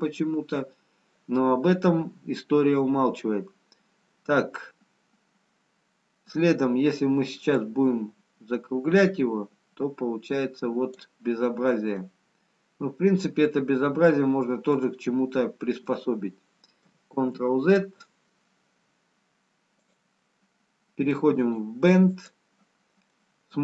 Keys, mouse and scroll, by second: 7.5 click, 12.3 middle click, 12.3-12.7 scroll down 5, 18.8 ctrl+z, 19.9 click, 22.1 click, 23.3 middle click.